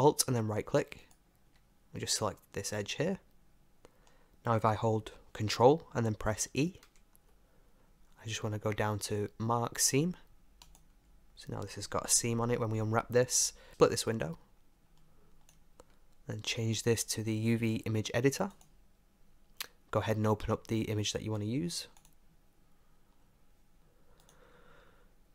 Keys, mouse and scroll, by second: 1.0-2.7 right drag, 2.1-6.9 middle drag, 6.9 ctrl+e, 12.1 Tab, 13.5 Tab, 14.2-16.1 drag, 16.7-18.6 drag, 22.0 click, 24.4-25.3 drag.